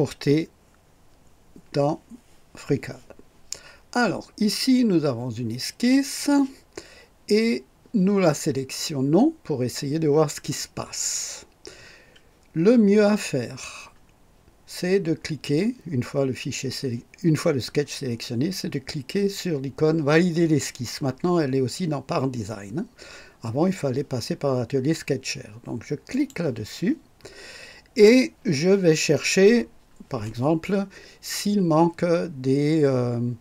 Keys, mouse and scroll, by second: 5.9 click, 26.1 click.